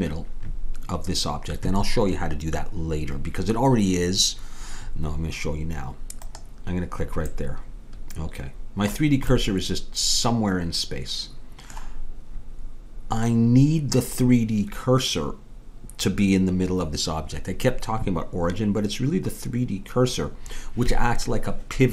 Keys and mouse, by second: 6.2-7.4 right drag, 7.4-9.2 middle drag, 9.4-14.6 middle drag.